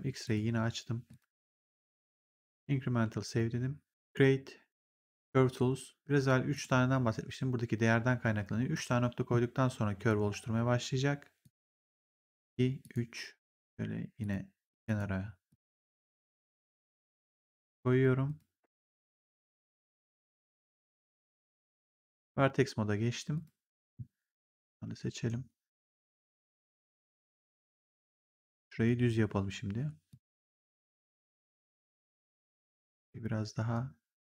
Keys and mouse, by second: 0.1 click, 3.1 click, 6.4 click, 8.7 click, 11.3 click, 20.8 click, 21.3 w, 23.2 click, 24.5 right click, 25.9 right click, 27.9 click, 29.1 r, 30.0 click, 31.7 click, 32.9 w, 33.7 click.